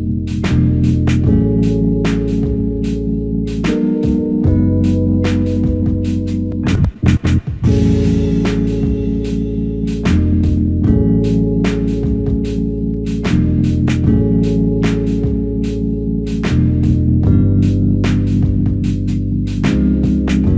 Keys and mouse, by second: 2.9 double click, 8.2 shift+click, 9.5 shift+click, 10.3 double click, 11.2 alt+click, 14.1 alt+shift+click, 16.6 alt+click.